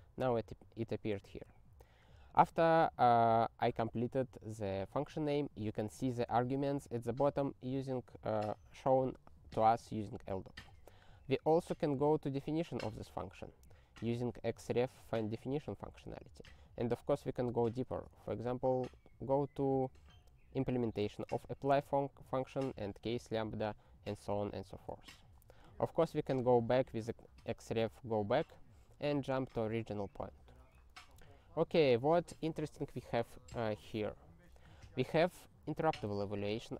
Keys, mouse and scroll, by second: 1.3 space, 10.8 ctrl+b, 13.1 alt+., 17.3 click, 17.9 ctrl+p, 18.4 alt+., 21.1 click, 22.0 alt+., 25.5 alt+,, 26.4 alt+,, 27.9 alt+,, 29.3 ctrl+a, 30.6 ctrl+n, 30.7 ctrl+n, 30.9 ctrl+n, 35.8 ctrl+alt+f.